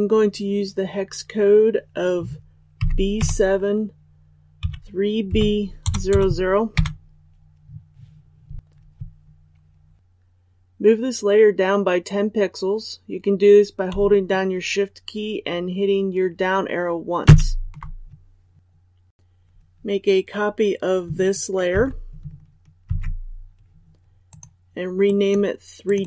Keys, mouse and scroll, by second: 17.2 shift+Down, 21.7 ctrl+c, 22.8 ctrl+v, 24.2 click.